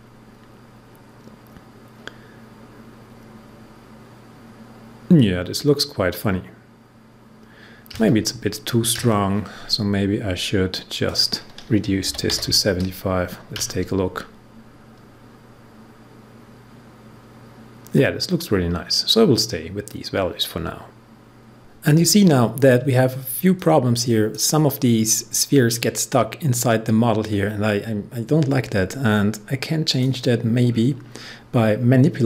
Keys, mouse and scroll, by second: 11.0 click, 11.8-12.7 typing, 23.5-26.8 drag, 29.8 click, 30.6 scroll down 1.